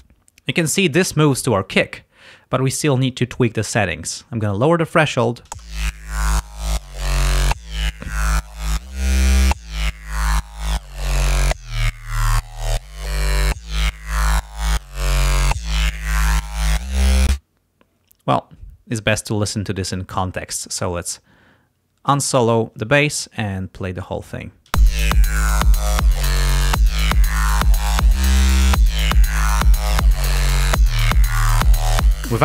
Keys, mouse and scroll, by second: 4.5 click, 5.5 space, 10.9-11.9 drag, 12.6-14.1 drag, 14.4 click, 15.2-16.8 drag, 17.3 space, 19.6 click, 22.1 click, 24.8 space.